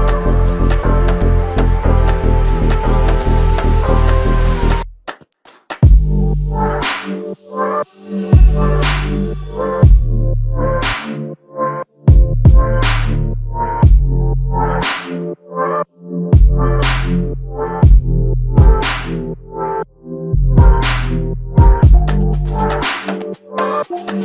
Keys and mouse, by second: 5.0 double click, 13.4 double click, 21.5 double click.